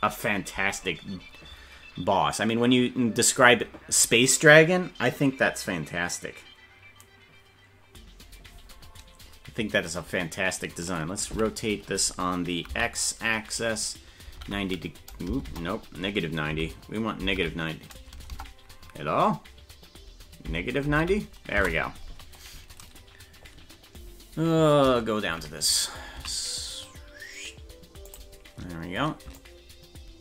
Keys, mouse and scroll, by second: 11.3 r, 22.6-23.0 scroll down 4, 23.5-24.1 scroll up 6, 24.4 scroll down 2, 25.3 KP_Decimal, 26.2 s, 29.5 ctrl+click.